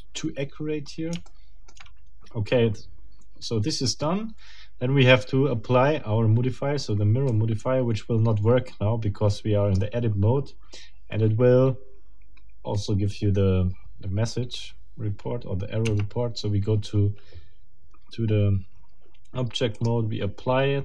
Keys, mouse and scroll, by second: 0.6-1.0 scroll up 2, 1.2 shift+middle click, 2.8 scroll down 2, 4.1 scroll down 2, 7.3-9.9 middle drag, 15.8 Tab, 17.5 scroll down 2, 19.8 click.